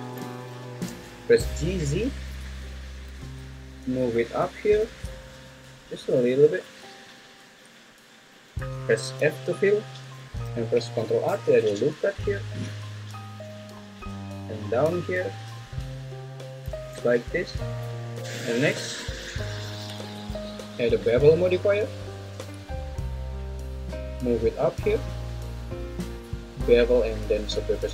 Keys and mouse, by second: 0.5 g, 0.8 z, 9.2 f, 11.0 ctrl+r, 16.5 click, 16.9 Tab, 19.6-21.4 drag, 22.5-24.7 drag.